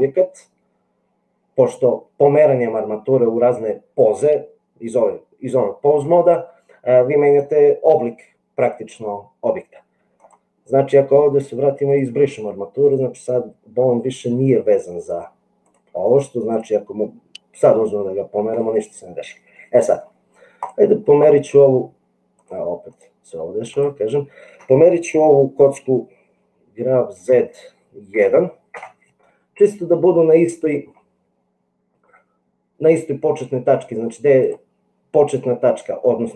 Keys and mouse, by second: 11.8 click, 15.1 click, 16.5 click, 17.8 g, 19.6 middle click, 20.5 click, 22.4 click, 26.8 g, 30.1 middle click, 34.4 click.